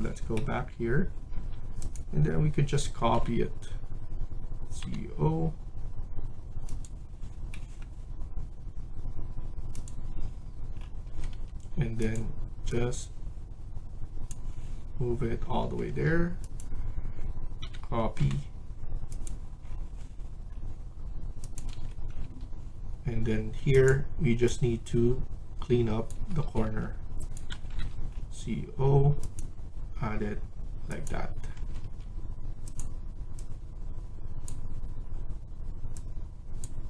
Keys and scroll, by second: 1.2 Escape, 3.0 c, 4.7 o, 11.0 Escape, 11.2 Escape, 15.5 Escape, 15.8 Escape, 17.5-18.1 typing, 21.6 Escape, 22.1 Escape, 26.0 Escape, 26.4 Escape, 26.6 Escape, 27.4-27.7 typing, 31.4 Escape, 31.7 Escape.